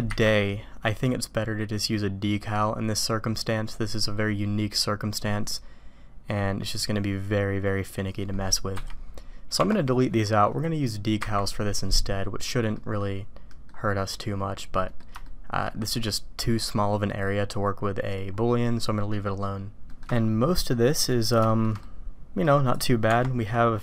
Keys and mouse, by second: 12.8 Delete, 12.8 click, 13.5 drag, 14.2-15.0 drag, 15.2-15.6 shift+drag, 19.9 shift+middle drag, 20.7-21.2 middle drag, 21.5 shift+click, 21.8-22.4 middle drag, 22.6 click.